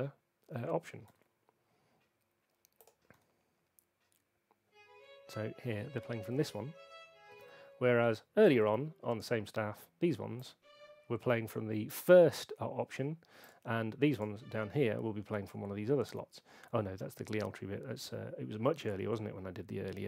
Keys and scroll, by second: 1.1 p, 3.1 p, 7.3 space.